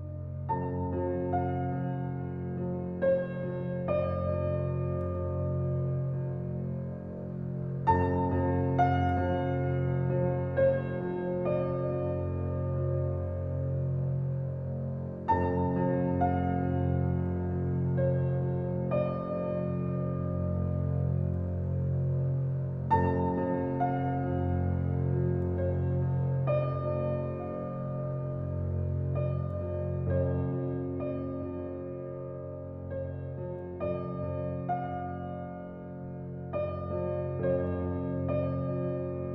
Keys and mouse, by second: 0.0-1.0 drag, 1.2-1.6 drag, 1.7-2.1 drag, 3.4-3.9 drag, 4.0-5.0 drag, 9.2-9.7 drag, 9.8-10.1 drag, 10.2 drag, 10.8-11.3 drag, 11.4-11.7 drag, 12.3 drag, 12.8-13.1 drag, 13.2-13.6 drag, 13.8-16.8 drag, 21.2-22.9 drag, 23.9 drag, 24.3-24.7 drag, 25.5-26.0 drag, 26.3-26.6 drag, 27.1 click, 27.5 click, 28.4-29.7 drag, 29.9-30.9 drag, 31.0 drag, 31.5-32.1 drag, 32.3-33.1 drag, 34.4 drag, 34.9-35.3 drag, 35.4 drag, 35.8 click, 36.0-36.3 drag, 36.7 click.